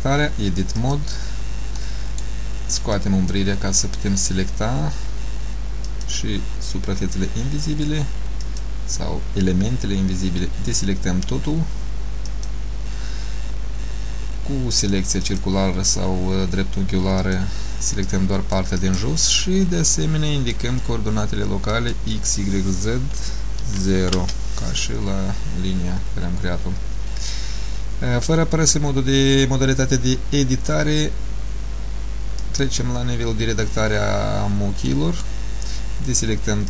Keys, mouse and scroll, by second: 1.9 middle click, 3.0 click, 8.6 click, 14.9 click, 15.4 click, 20.0 click, 21.8 click, 32.5 click, 35.0 middle click.